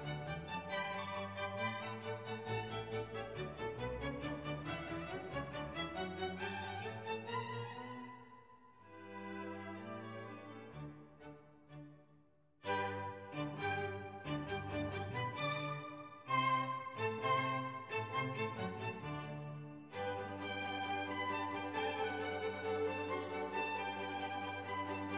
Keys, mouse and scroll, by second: 0.0-0.9 typing, 2.3 click, 5.0 click, 5.8 click, 7.6 click, 8.8 click, 10.0 click, 12.5 click, 13.7 click, 14.6 click, 19.0 click.